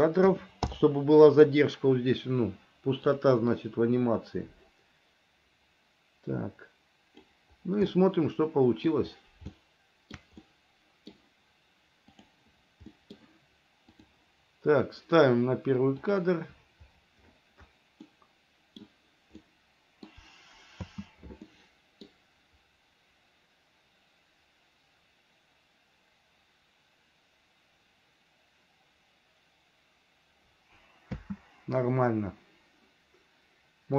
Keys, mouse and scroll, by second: 3.3 click, 3.8-7.5 drag, 8.1-9.1 middle drag, 9.7 shift+middle click, 10.7 middle click, 12.3 click, 13.1 middle click, 14.2 click, 16.2 click, 18.2 middle click, 19.6 middle click, 21.0 space, 21.7 middle click, 31.4 space.